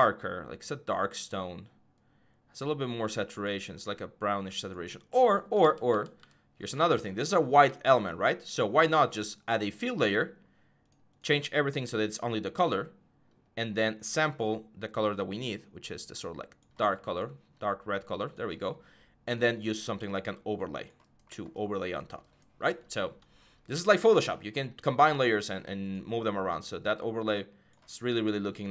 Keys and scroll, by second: 5.4 ctrl+z, 5.7 ctrl+z.